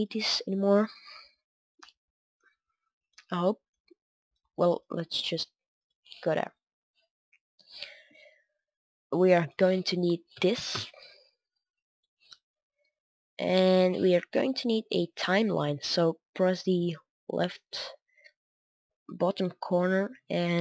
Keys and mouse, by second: 6.2-11.8 drag, 7.6 typing, 10.0 t, 13.2 click, 13.4 click, 13.6-20.6 drag.